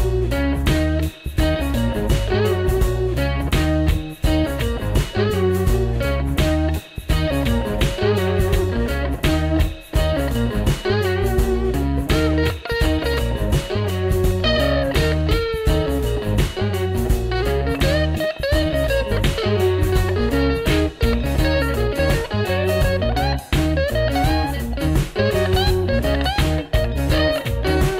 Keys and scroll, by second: 0.6 alt+super+Right, 1.8 alt+super+Left, 6.1-8.4 typing, 10.2-11.6 typing, 21.8 ctrl++, 22.2 ctrl++.